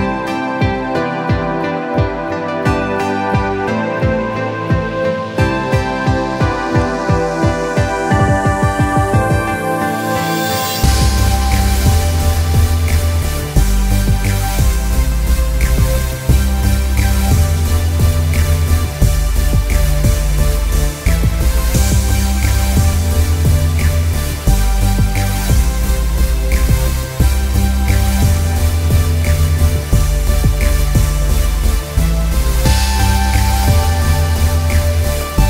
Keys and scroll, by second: 0.2 z, 2.3 ctrl+=, 5.5 ctrl+j, 8.6 ctrl+j, 12.6 ctrl+b, 33.3 ctrl+b.